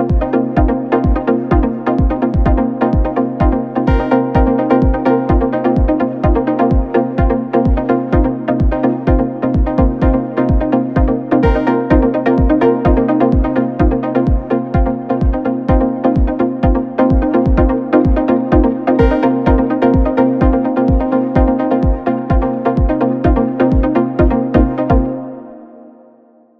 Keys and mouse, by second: 4.3 z, 4.9 click, 5.6 z, 6.3 s, 7.6-11.1 drag, 8.4 s, 10.4 s, 11.1-12.6 middle drag, 11.3 s, 12.6-25.1 drag, 14.3 KP_1, 14.5 KP_3, 14.7 KP_1, 16.0 shift+d, 21.1 KP_1, 21.3 KP_3, 23.0 shift+a, 24.4-26.5 typing, 25.1-26.5 middle drag.